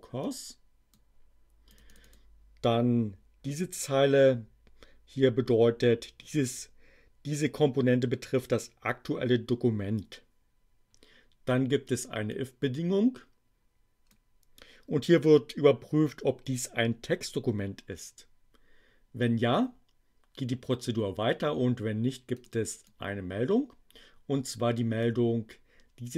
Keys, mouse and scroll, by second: 0.2 click, 1.7 click, 12.2-14.2 drag, 22.3 click, 22.7-25.2 drag.